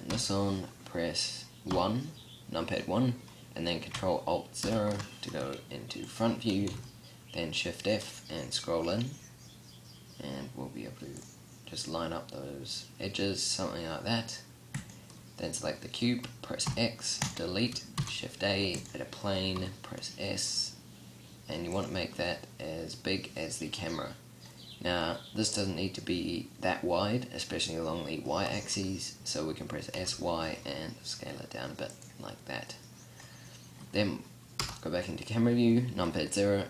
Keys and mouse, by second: 0.1 n, 1.8 KP_1, 4.7 ctrl+alt+KP_0, 6.8 shift+f, 14.8 right click, 16.7 x, 18.0 shift+a, 19.6 s, 21.9 click, 28.5 s, 32.7-34.6 middle drag, 34.6 KP_0.